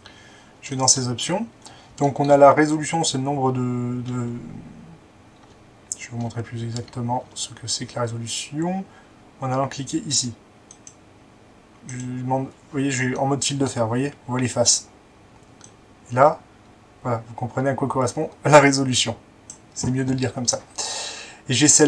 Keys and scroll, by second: 5.5 Tab, 6.0-6.3 Tab, 6.8 Tab.